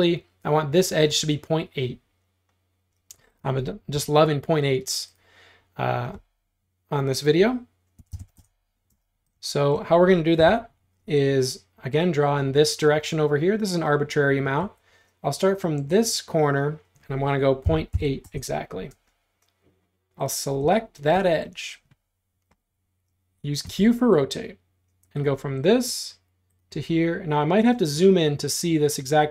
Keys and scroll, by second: 4.0 r, 7.8-8.9 typing, 10.4 l, 14.7 Escape, 17.7-19.0 typing, 23.7 q.